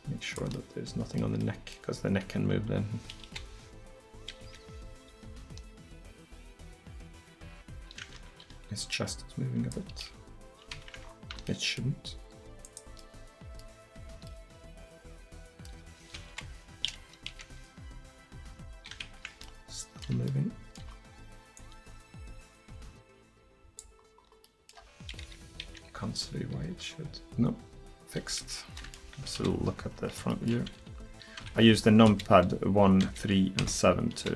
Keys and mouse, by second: 1.1-1.7 middle drag, 3.3 KP_1, 4.5 KP_3, 5.3 r, 9.0-13.4 drag, 10.1 r, 14.9 middle click, 15.2 middle click, 15.4 middle click, 16.3 KP_1, 17.3 KP_3, 18.2 r, 19.7 middle click, 19.9 middle click, 21.6-23.5 drag, 24.1-24.7 middle drag, 25.7 KP_3, 26.7-28.8 middle drag, 26.7 r, 29.4 KP_1, 30.8 r, 32.1-34.3 typing.